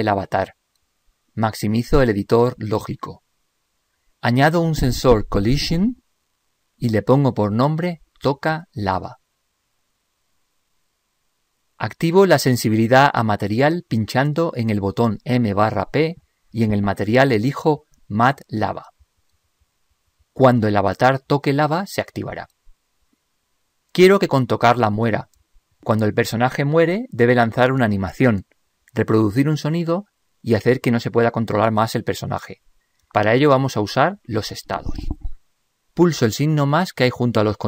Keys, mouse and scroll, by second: 0.1-1.8 drag.